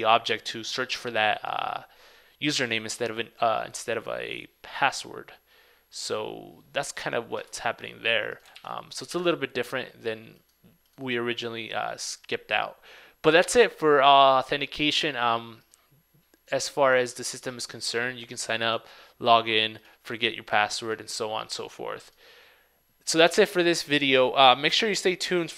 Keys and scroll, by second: 8.7 super+w, 9.2 super+Tab.